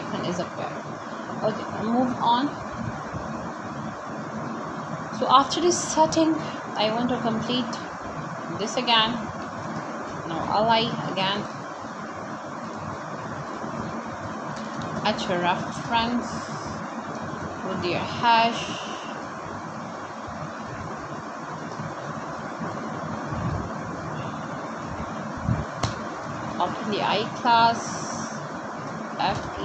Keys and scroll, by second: 0.3 Return, 1.8 shift+3, 5.1 Right, 6.4 shift+., 7.0 shift+,, 9.3 i, 10.2 space, 10.7 c, 10.9 l, 11.5 Return, 12.8-18.3 typing, 20.3 BackSpace, 22.9-25.4 typing, 27.4 Right, 29.2 shift+..